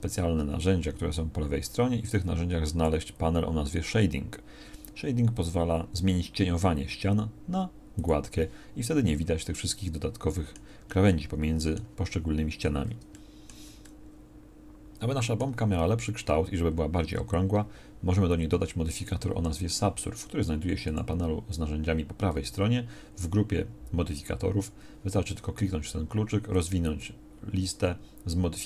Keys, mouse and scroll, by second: 2.2-13.0 drag.